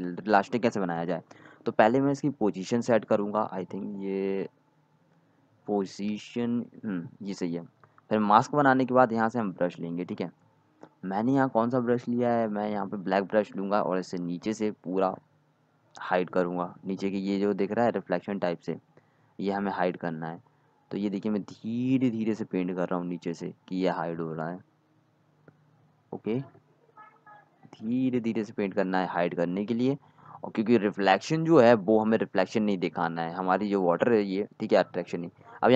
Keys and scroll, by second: 13.6-14.8 typing, 32.9 x, 35.1 z.